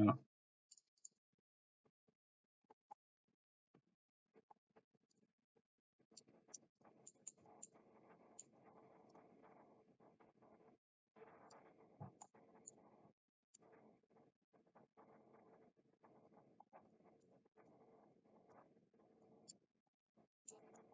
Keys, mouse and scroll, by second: 1.0 click, 5.1 click, 6.8 click, 7.2 middle click, 7.6 middle click, 9.0 click, 12.3-12.8 drag, 13.6-17.8 drag, 18.5 click, 20.5 middle click.